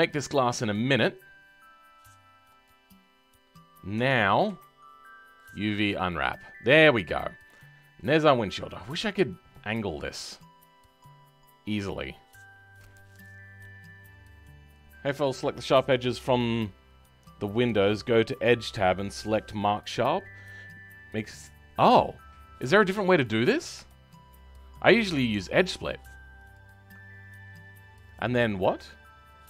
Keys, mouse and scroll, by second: 2.6 click, 22.7 middle click, 23.4-23.8 scroll up 2, 23.8-25.8 shift+middle drag, 25.8 alt+click, 26.5 alt+click, 27.0-27.8 scroll down 4.